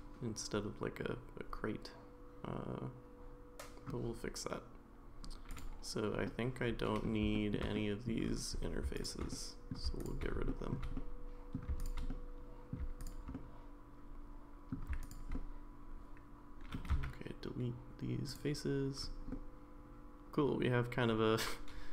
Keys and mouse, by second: 6.3 middle click, 7.3 shift+middle click, 7.7 middle click, 8.9 shift+click, 9.3 middle click, 10.5 shift+middle click, 11.0 middle click, 12.1 middle click, 13.3-14.7 middle drag, 15.0 shift+click, 15.3-16.8 middle drag, 16.9 x, 19.3-21.9 middle drag.